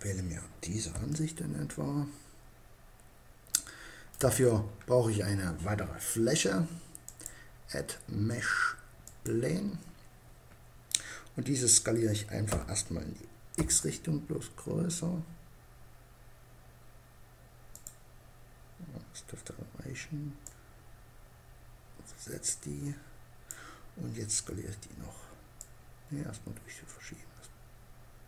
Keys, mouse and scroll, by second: 0.6-2.5 middle drag, 6.5-8.1 drag, 11.9 s, 17.3-18.8 drag, 20.0-21.5 drag, 25.2-26.9 drag.